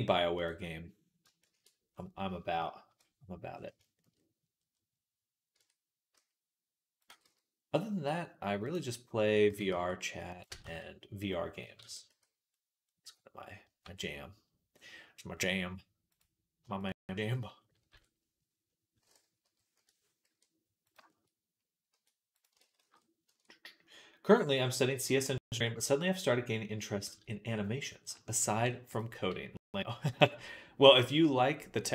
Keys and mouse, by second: 1.3 shift+c, 2.7 KP_Decimal, 5.4 Tab, 6.0 s, 6.9 g, 9.3 s, 10.3-13.5 ctrl+right drag, 10.5 ctrl+z, 11.6 ctrl+a, 13.7 Tab, 17.7 KP_3, 20.1 e, 21.7 r, 22.4 ctrl+z, 22.6 ctrl+z, 27.3 middle click, 28.4 ctrl+r.